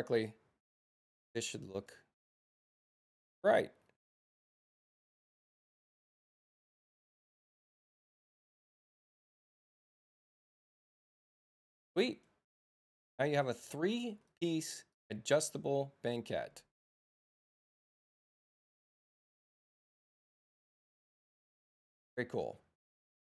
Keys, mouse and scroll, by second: 1.7 click, 2.3 click, 5.0 click, 6.5 click, 8.9 click, 12.7 space, 13.3 click, 17.1-18.6 drag, 18.3 Return, 19.2 Return, 22.9 click.